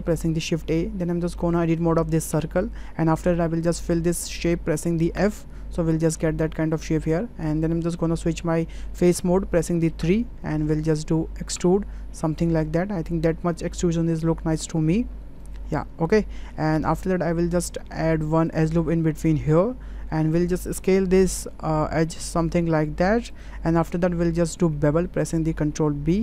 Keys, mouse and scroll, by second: 1.3 shift+click, 2.3 Tab, 5.1 f, 5.9-7.4 middle drag, 10.0 3, 11.5 e, 15.8 middle click, 17.0 ctrl+middle click, 18.5 click, 19.5 click, 22.2 s, 24.2 ctrl+click, 25.5 ctrl+b.